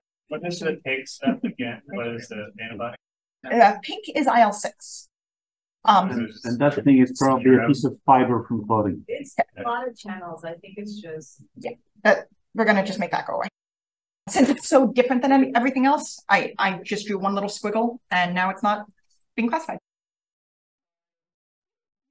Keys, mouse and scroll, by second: 1.2-1.5 drag, 1.2-2.2 scroll up 1, 5.5 click, 6.8 v, 7.9-12.4 drag, 9.9-10.9 scroll up 1, 10.9-12.2 scroll up 1, 12.2-13.1 scroll up 1, 12.6 c, 13.1-13.8 scroll down 1, 13.8-14.2 scroll up 1, 18.6-20.1 scroll up 1, 18.9-20.8 typing, 20.1 scroll up 1, 20.3-20.9 scroll down 1, 20.3 click, 21.1-22.1 drag.